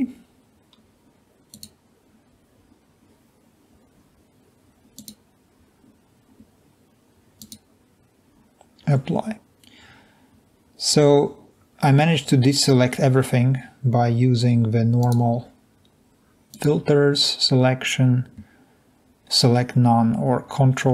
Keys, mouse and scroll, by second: 7.4 click, 15.0 click.